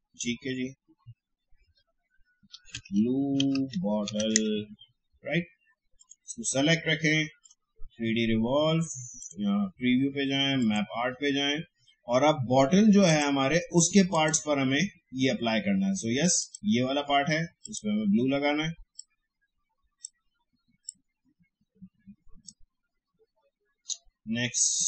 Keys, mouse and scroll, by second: 1.6-4.7 typing, 6.0 click, 13.0 click, 19.1-24.8 drag.